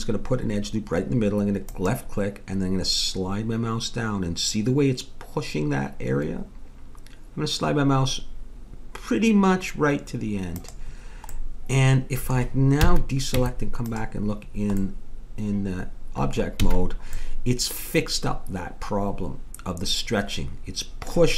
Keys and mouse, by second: 11.4 middle click, 12.8 a, 13.3 Tab, 16.7 a, 17.2-19.0 middle drag.